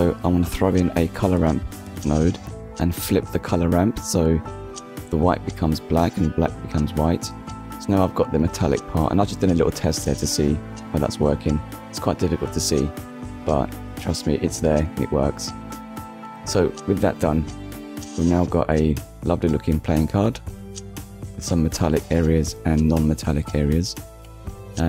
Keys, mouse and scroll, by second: 1.0 click, 2.5 click, 4.3 click, 5.4 middle click, 8.7 click, 13.8 click, 14.6 middle click, 16.3 click, 17.8 middle click, 19.4 middle click, 20.1 KP_1, 20.7 scroll down 1, 21.8 g, 22.4 x, 23.8 click.